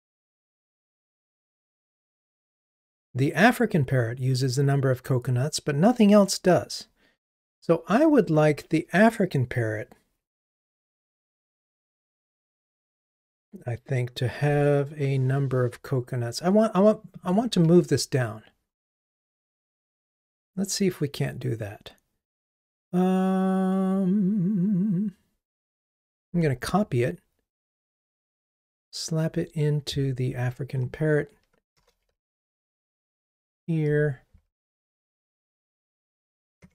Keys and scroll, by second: 26.2 super+c, 32.2 super+v.